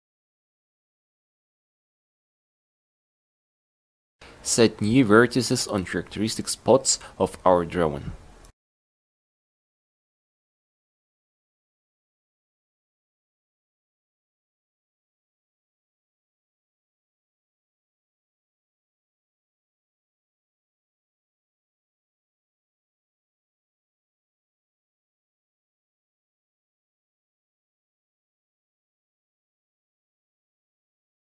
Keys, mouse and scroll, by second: 0.1-2.3 drag, 3.9 a, 4.1 c, 6.5 ctrl+r, 8.7 a, 9.0 c, 11.5 a, 12.0 c, 12.7-15.4 drag, 15.7 ctrl+r, 17.1 a, 17.3 c, 17.7-19.2 drag, 24.0 a, 24.2 c, 28.8 ctrl+r, 29.9 a, 30.1 c.